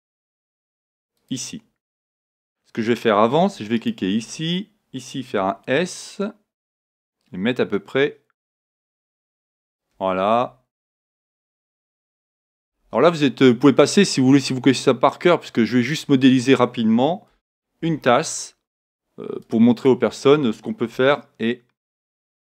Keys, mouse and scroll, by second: 1.3-3.0 drag, 5.2 right click, 5.2 s, 9.8-11.4 drag, 11.3-13.0 right drag, 11.5 click, 12.6 s, 16.0-17.8 drag, 17.8 ctrl+r, 19.9-21.8 drag, 20.9 s.